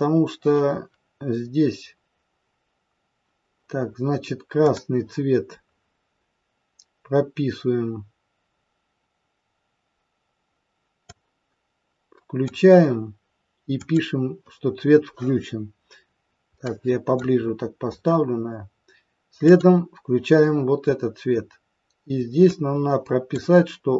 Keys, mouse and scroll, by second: 4.6 click, 11.0 click, 13.8 click, 16.0-16.4 scroll up 3, 16.4 middle click, 17.3-18.2 scroll up 8, 19.5 click.